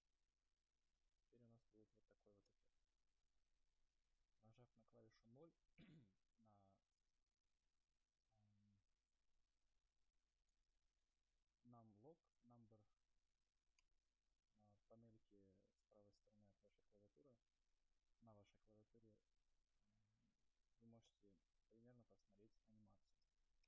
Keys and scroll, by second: 0.3 space, 2.8 0, 14.0 0, 21.3 0.